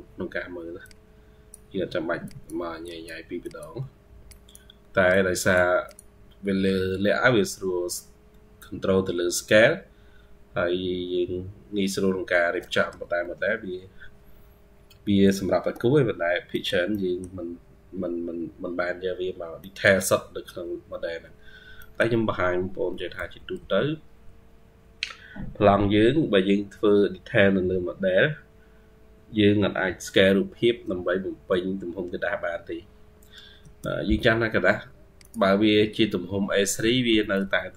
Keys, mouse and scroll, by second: 15.3 Escape, 16.8 middle click, 19.0-19.5 scroll down 2, 19.5 middle click, 21.4 scroll down 1, 21.6 middle click, 36.6-37.2 typing.